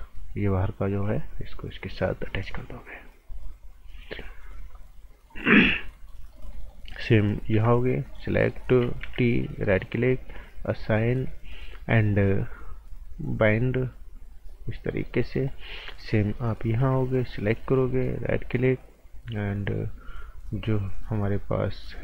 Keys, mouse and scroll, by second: 0.3 click, 4.2 click, 5.6 right click, 7.5 b, 8.0 click, 8.3 right click, 9.0 t, 9.6 right click, 10.7 click, 13.4 click, 14.7 scroll down 1, 14.9 right click, 15.5 scroll up 1, 16.8 b, 17.2 click, 17.9 alt+right click, 20.6 right click.